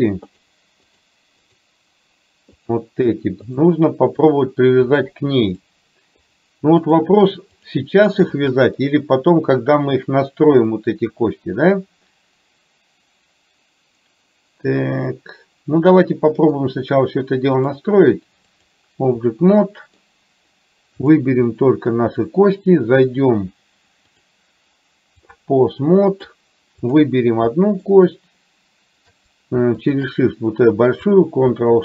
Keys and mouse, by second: 0.4 shift+click, 0.9 shift+click, 3.6 shift+click, 4.2 shift+click, 5.1 shift+click, 5.6 shift+click, 6.3 shift+click, 6.8 shift+click, 8.8 middle click, 10.8-16.6 middle drag, 17.7-18.8 drag, 19.7 middle click, 21.1 click, 21.6-21.9 middle drag, 24.3-25.4 drag, 25.9-26.4 middle drag, 26.9 click, 27.7 shift+middle click.